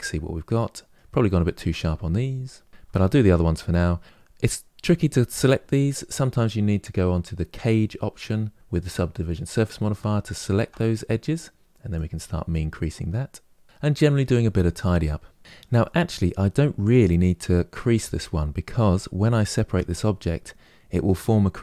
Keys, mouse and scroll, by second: 1.8-2.7 scroll up 3, 2.7-5.9 shift+middle drag, 8.5 click, 10.0 alt+click, 11.6-13.6 drag, 15.4-18.6 shift+middle drag.